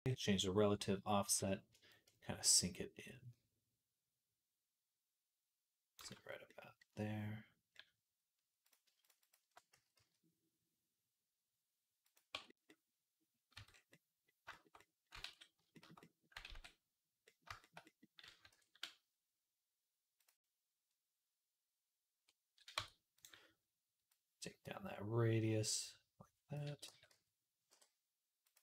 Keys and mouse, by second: 8.5 shift+middle click, 8.9 alt+shift+click, 9.1-16.2 alt+shift+middle drag, 9.6 s, 13.4 Tab, 15.1 ctrl+s, 16.4 ctrl+s, 18.4 ctrl+s, 20.0 click, 22.6 Tab, 23.0 click, 24.0-28.4 drag, 26.7 g, 28.5 s.